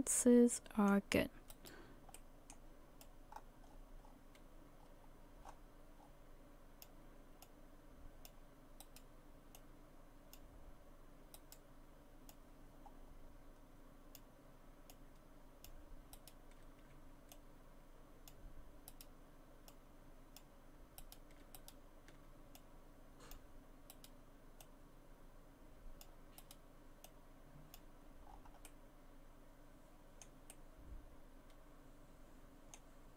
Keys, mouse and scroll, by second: 1.5 right click, 2.2 middle click, 3.0 click, 7.4 click, 8.8 right click, 9.6 click, 11.4 right click, 12.3 click, 14.9 click, 16.2 right click, 17.3 click, 18.9 right click, 19.7 click, 21.0 right click, 21.6 shift+right click, 22.6 click, 23.9 right click, 24.6 click, 26.4 right click, 27.1 click, 28.3-28.7 scroll down 4, 28.7 middle click, 29.8 middle click.